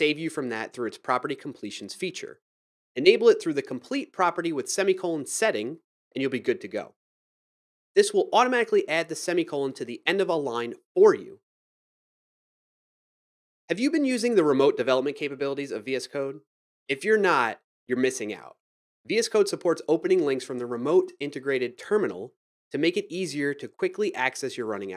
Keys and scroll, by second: 0.0-1.9 typing, 7.7 Return, 8.3-8.7 typing, 9.7 Tab, 10.5-10.9 typing.